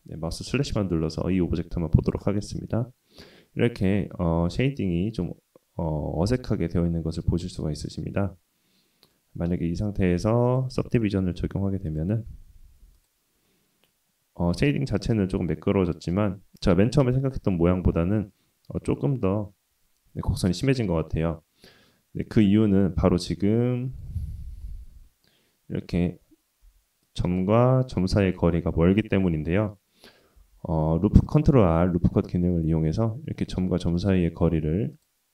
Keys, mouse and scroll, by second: 1.7-5.5 middle drag, 6.6-7.9 drag, 8.7 click, 9.1-10.1 middle drag, 10.3-11.7 middle drag, 12.9 /, 14.1 click, 14.6 click, 15.4 middle click, 16.4-19.0 middle drag, 21.3 ctrl+z, 22.1 Tab, 22.8 middle click, 23.2 scroll up 2, 23.6 shift+middle click, 24.6 /, 24.9 scroll up 2, 26.6-27.0 scroll up 1, 26.6 1, 27.1 click, 27.9 click, 30.4 ctrl+r.